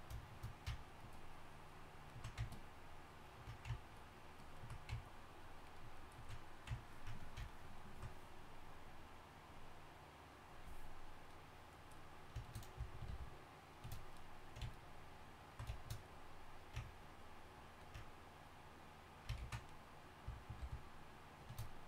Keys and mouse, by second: 13.1 shift+f, 19.7 ctrl+z, 20.6 shift+f.